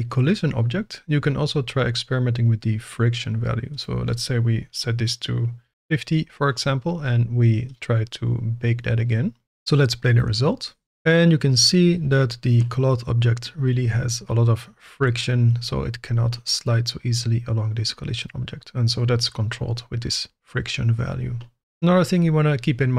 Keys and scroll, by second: 5.7 Return.